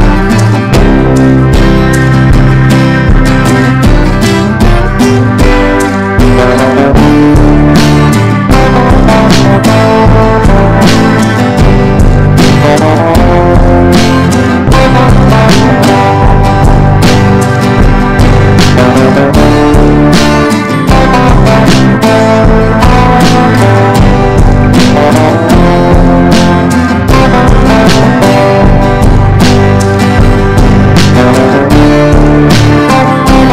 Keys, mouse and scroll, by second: 8.4 ctrl+d, 9.1-33.5 drag.